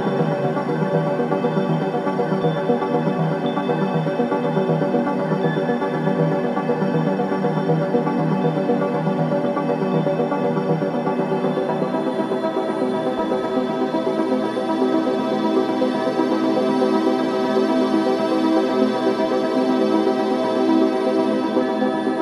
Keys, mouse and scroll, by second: 5.5 shift+right click, 5.9-6.4 scroll up 1, 8.1 click, 8.7-9.2 scroll up 1, 9.6 click, 10.4-10.8 scroll down 1, 11.5 click, 11.8-12.6 scroll down 1, 15.5-17.1 drag, 18.4 ctrl+click, 19.5-19.9 scroll down 1, 20.5 click, 21.4-22.2 scroll down 1.